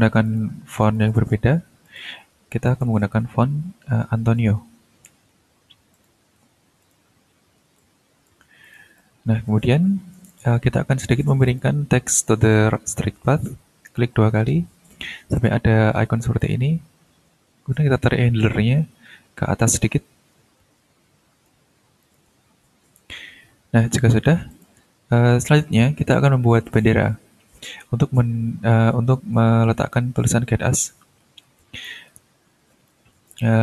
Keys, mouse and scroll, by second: 0.2 click, 0.8 click, 1.8 ctrl+click, 2.6 ctrl+click, 3.1 ctrl+a, 3.9-5.8 typing, 5.9 click, 6.8 click, 7.8 ctrl+click, 8.6 ctrl+click, 9.2-10.6 drag, 11.0 click, 11.4 click, 13.8 click, 16.4-21.6 drag, 22.0 click, 22.8 ctrl+scroll down 2, 23.7 ctrl+scroll up 2, 24.5 ctrl+click, 24.8-26.1 ctrl+scroll down 2, 31.0 ctrl+scroll up 1, 31.3-31.8 ctrl+scroll down 1, 31.8 ctrl+click, 33.2 click.